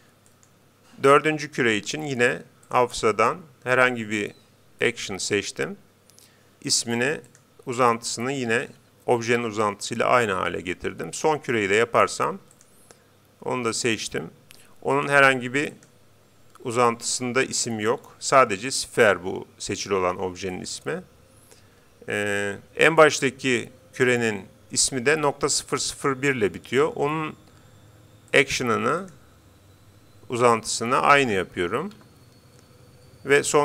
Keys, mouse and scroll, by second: 0.3-2.0 right drag, 2.7-4.3 drag, 6.8-8.4 drag, 11.2-12.8 right drag, 12.6-14.2 drag, 15.0-16.6 drag, 20.6-22.2 right drag, 28.4-30.0 drag, 31.2 0.